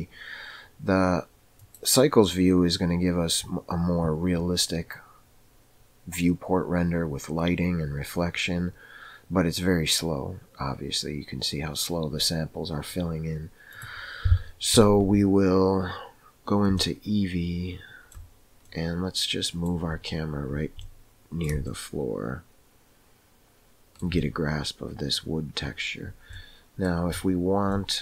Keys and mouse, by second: 1.5 click, 17.0-18.2 shift+middle drag, 19.2 middle click, 22.4-26.0 shift+middle drag.